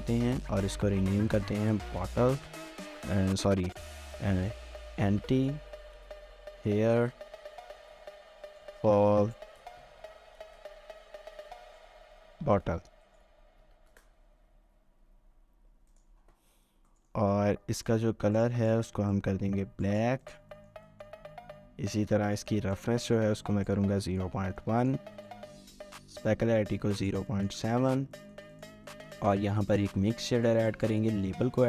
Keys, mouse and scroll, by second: 1.3-10.2 typing, 12.4-14.4 typing, 16.9 middle click, 18.9 double click, 20.5 middle click, 24.6 middle click, 26.3 middle click, 28.1 middle click, 29.3-29.9 scroll down 1, 29.9 typing, 30.7 middle click, 31.4-31.6 typing.